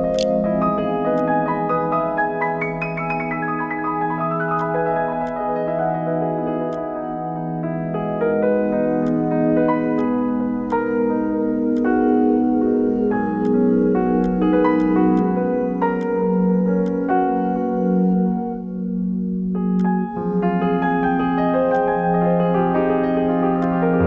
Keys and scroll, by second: 0.0-0.4 typing.